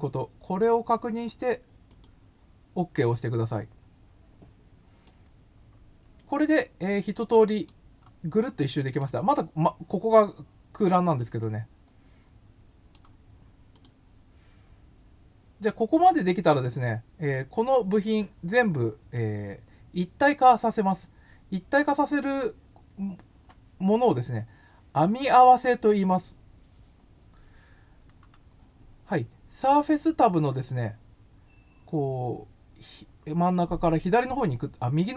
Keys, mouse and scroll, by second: 1.9 click, 5.0-7.6 middle drag, 8.0 scroll up 1, 8.5 middle click, 11.2-12.9 middle drag, 13.7 click, 16.6-18.0 middle drag, 19.1-22.2 middle drag.